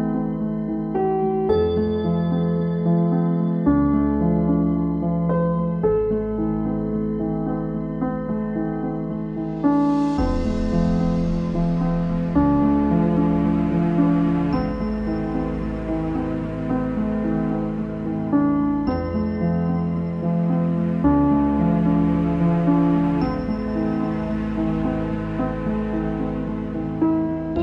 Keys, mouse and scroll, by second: 0.2 shift+middle click, 1.0 z, 3.8 click, 5.6 click, 7.7 alt+e, 9.8 z, 10.0 middle click, 10.3 ctrl+s, 10.6 click, 11.0-12.4 shift+middle drag, 12.4 Tab, 12.6 middle click, 13.0 Tab, 13.4 Tab, 13.7 middle click, 14.4 ctrl+z, 14.6 ctrl+z, 14.9 ctrl+z, 15.1 ctrl+z, 15.4 ctrl+z, 15.9 ctrl+z, 16.6 Tab, 17.1 click, 17.8 ctrl+a, 18.0 Tab, 19.2 shift+click, 21.5 alt+e, 23.1 Tab, 23.3 middle click, 24.2 z, 25.0 click, 25.3 z, 25.5 shift+middle click, 25.9-26.5 scroll up 7, 26.5 scroll down 4, 26.9 Tab, 27.2 scroll down 6, 27.5 Tab.